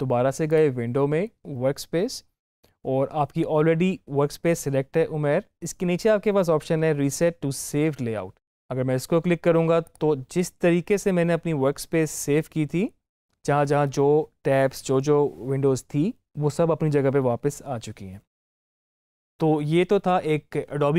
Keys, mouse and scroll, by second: 0.4 click, 0.4 click, 9.8 click.